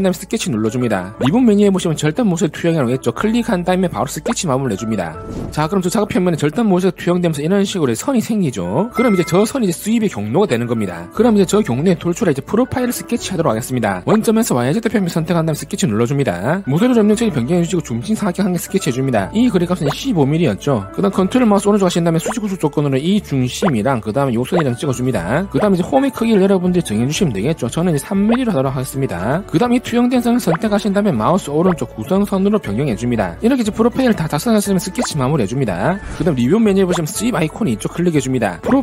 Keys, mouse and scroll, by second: 0.4 click, 3.8 click, 4.4 click, 17.0 alt+w, 17.4 scroll up 4, 17.9 middle click, 18.4 click, 19.1 click, 19.5 click, 19.9 click, 20.2 1, 20.5 5, 22.3 ctrl+right click, 23.0 click, 24.0 click, 25.0 click, 26.6 3, 27.2 d, 27.9 click, 28.2 click, 28.6 3, 30.7 click, 31.6 right click, 32.9 click, 38.6 click.